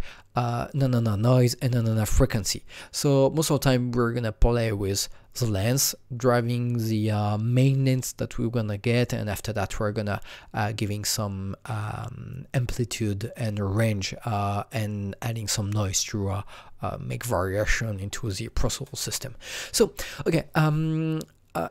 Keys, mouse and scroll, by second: 21.6 click.